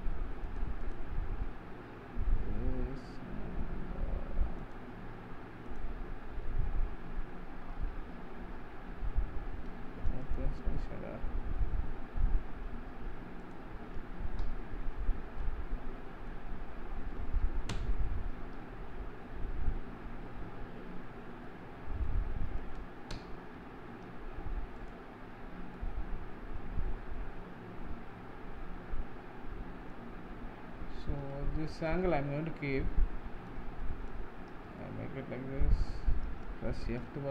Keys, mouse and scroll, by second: 4.7 click, 5.7 click, 10.4 click, 13.6 click, 14.5 KP_Decimal, 15.2 scroll down 2, 15.5-15.9 middle drag, 16.1-17.8 middle drag, 17.8 ctrl+alt+KP_0, 18.7-21.0 scroll down 8, 21.0 scroll up 1, 21.7-23.2 middle drag, 23.2 ctrl+alt+KP_0, 24.8-25.8 drag, 25.8-29.4 middle drag, 31.5-32.2 shift+middle drag, 32.2-32.8 scroll up 1, 32.8 scroll up 1, 32.9-34.4 middle drag, 34.4-34.9 scroll down 1, 34.9-37.3 shift+middle drag.